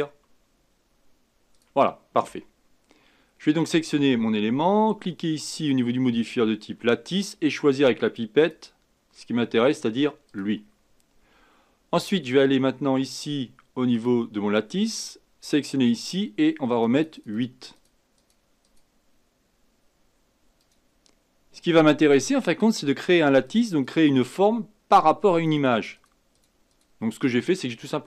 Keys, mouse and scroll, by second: 3.6 click, 5.6-8.5 drag, 13.9 click, 15.4 click, 16.7-28.0 drag.